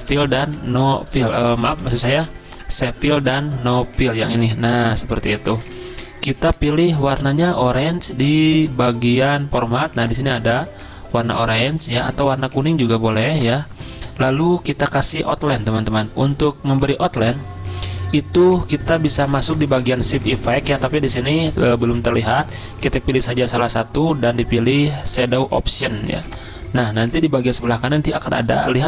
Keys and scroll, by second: 1.9 ctrl+z, 5.9 ctrl+a.